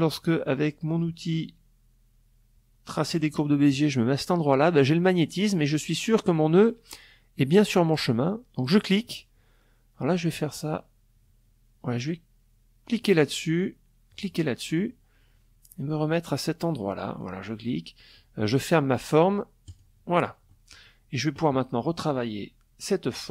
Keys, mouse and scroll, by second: 1.6 click, 7.2 click, 11.4 click, 12.6 click, 13.3 click, 15.7 click, 18.2 click, 19.0 click, 22.7 click.